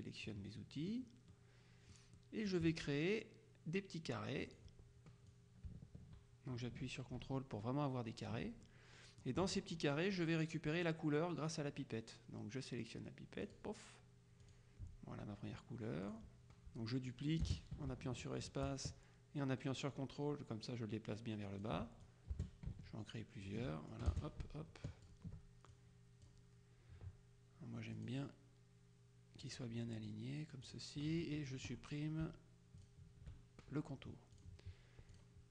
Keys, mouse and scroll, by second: 0.8 middle click, 2.2 click, 4.5 click, 5.4-8.8 drag, 13.6 click, 14.6 click, 16.2 click, 17.2-22.2 drag, 17.6 space, 22.4 space, 24.0 ctrl+click, 24.2 ctrl+space, 25.8-26.8 ctrl+drag, 28.0 click, 29.5 click, 30.8 click, 32.9 shift+click, 34.4 click, 35.2 click.